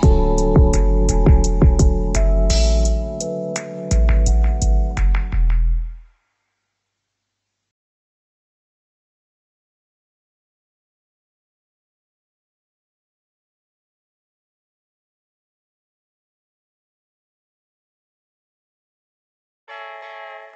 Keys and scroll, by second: 12.6 ctrl+0.